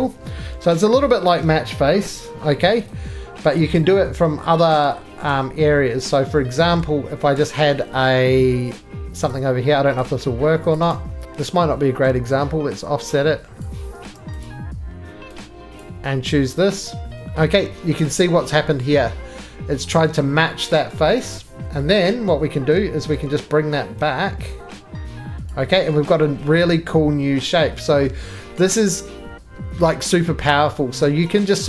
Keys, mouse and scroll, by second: 0.4 middle click, 1.0 click, 2.0 g, 3.5 click, 3.8 right click, 4.6-6.1 scroll, 5.2 middle click, 5.3 middle click, 6.1 middle click, 6.8 middle click, 6.8 scroll, 7.1 scroll down 2, 7.1 scroll down 1, 7.7 shift+middle click, 7.9-8.7 shift+scroll down 1, 8.7 click, 9.3 click, 9.5 scroll, 10.0 click, 10.7 click, 10.9 right click, 11.2 click, 11.2 middle click, 11.2 3, 12.0 middle click, 13.6 click, 13.6-14.0 scroll, 14.0 Escape, 14.4 click, 15.8 click, 16.8 click, 17.3 scroll, 18.5 scroll up 1, 20.7 scroll down 1, 20.8 scroll up 1, 20.9 middle click, 21.0 scroll down 2, 21.2 right click, 21.5-22.3 scroll down 3, 22.3 middle click, 22.5-25.1 scroll down 5, 23.1 middle click, 25.4 click, 27.1 scroll up 1.